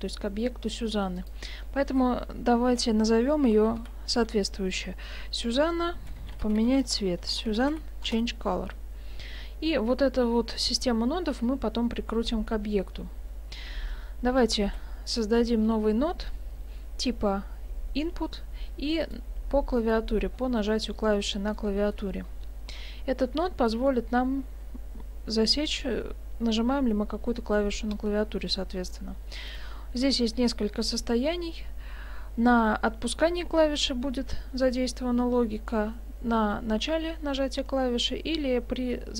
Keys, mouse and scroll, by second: 1.2 click, 4.1 n, 13.8-14.6 scroll up 1, 14.6 scroll up 2, 14.6 shift+a, 21.6 middle click, 22.3-22.8 scroll up 1, 22.8 scroll up 8, 23.2 middle click, 27.6 click.